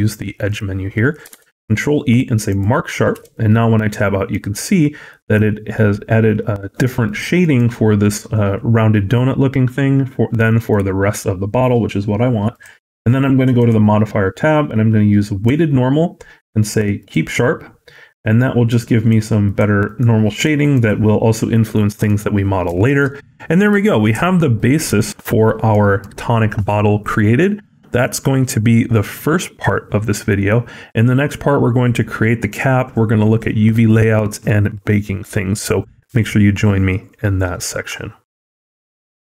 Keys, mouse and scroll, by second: 0.3 click, 1.2 ctrl+e, 3.0 Tab, 3.6 middle click, 4.6 middle click, 5.2 scroll down 1, 6.7 middle click, 7.3 middle click, 9.3 scroll down 1, 9.9-10.6 scroll down 6, 10.4 middle click, 12.4 click, 13.4 click, 16.8 click, 17.3-18.5 scroll up 6, 18.5 click, 18.9 click, 19.3 click, 19.7 click, 20.2 click, 20.6 click, 21.6 middle click, 21.6-22.6 scroll down 5, 22.6 shift+middle click, 23.0 middle click, 23.7 shift+middle click, 24.0 middle click, 24.5-24.8 scroll up 2, 24.8 shift+middle click.